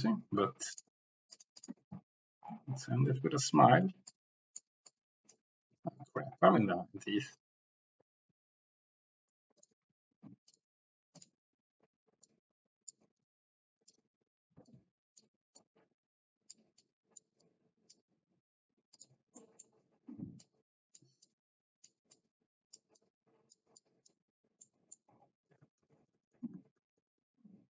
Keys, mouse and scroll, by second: 1.3 click, 1.5 click, 4.1 click, 4.9 click, 8.0 ctrl+z, 8.1 ctrl+z, 8.1 Escape, 9.5 click, 9.8 Tab, 12.3 click, 13.4 ctrl+z, 15.6 click, 16.8 click, 17.4 click, 17.7 click, 19.0 click, 19.4 middle click, 20.4 click, 21.2 click, 22.2 click, 23.0 click, 23.8 click, 24.6 click, 25.8 ctrl+z, 26.0 ctrl+z, 26.5 ctrl+z, 26.8 ctrl+z, 26.9 ctrl+z, 27.1 ctrl+z, 27.4 ctrl+z.